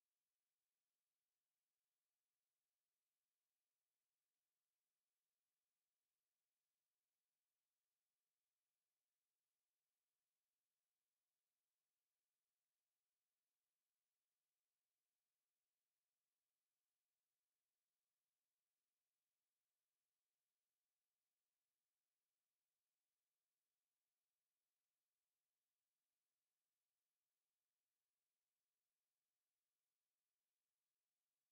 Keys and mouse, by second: 4.4 alt+right click, 5.8 alt+middle click.